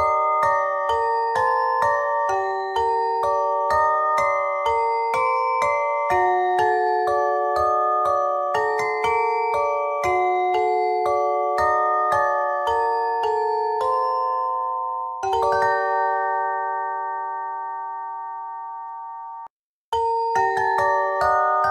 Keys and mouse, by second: 1.3 w, 4.9 ctrl+z, 5.5 Tab, 6.1 ctrl+a, 6.9 Tab, 7.5 w, 9.8 s, 14.7 ctrl+Tab, 17.0 o, 18.0 Tab, 18.3 Tab.